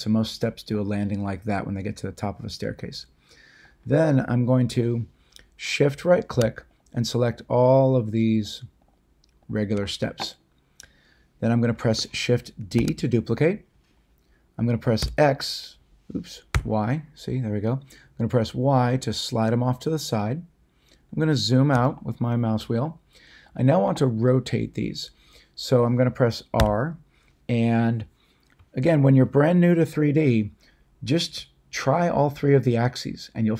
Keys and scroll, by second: 12.7 d, 15.0 x, 16.5 y, 26.5 r.